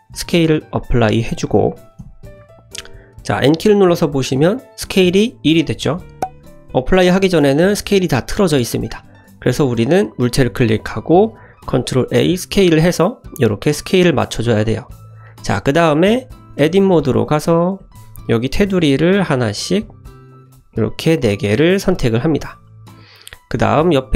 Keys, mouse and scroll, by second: 3.3 click, 6.0 ctrl+z, 9.4 click, 10.1 click, 11.8 ctrl+a, 15.2 click, 15.8 click, 16.6 Tab, 17.0 shift+middle click, 17.5 middle click, 17.8 2, 18.4 click, 19.3 shift+click, 20.3 shift+click, 20.7-21.1 middle drag, 21.8 shift+click, 22.4-23.2 middle drag.